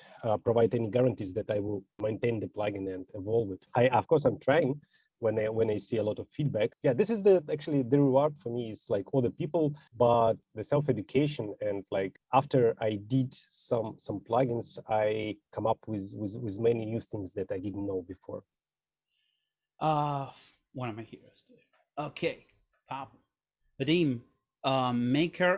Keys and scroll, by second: 23.3 Right.